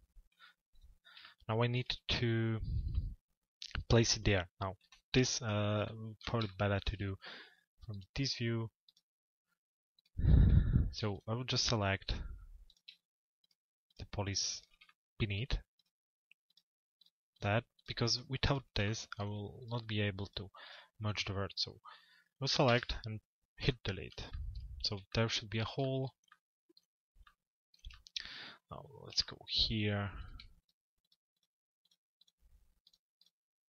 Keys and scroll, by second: 4.5 p.